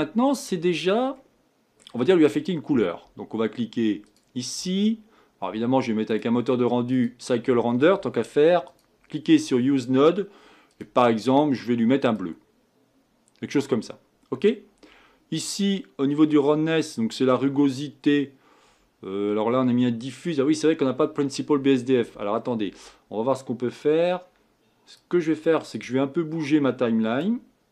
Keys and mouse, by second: 6.1-8.0 drag, 8.6-22.3 drag, 24.9-27.7 drag.